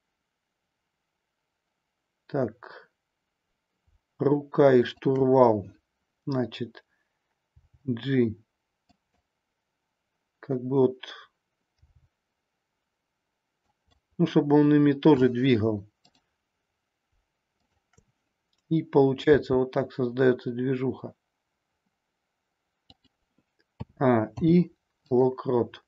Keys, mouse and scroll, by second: 4.8-5.8 shift+drag, 7.6 g, 8.9 click, 11.9 g, 13.6 click, 16.0-17.1 drag, 17.6-18.7 shift+drag, 19.2 g, 22.9 click, 23.7 a, 24.2 i.